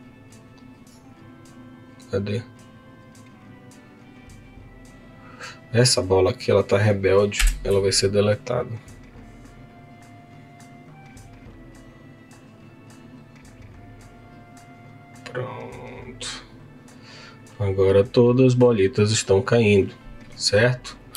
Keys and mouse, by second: 1.5 click, 5.5 click, 7.5 Delete, 8.9-10.4 drag, 19.5 click, 20.5 click.